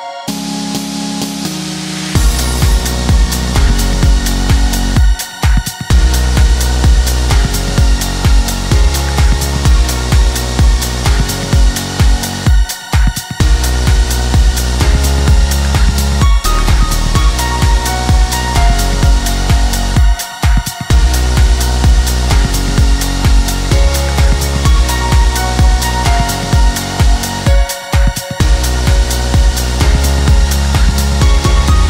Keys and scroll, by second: 2.5 Delete, 7.6 1, 7.9 Return, 17.4 1, 17.8 Return, 23.6 3, 23.8 Return, 26.9 1, 27.2 Return.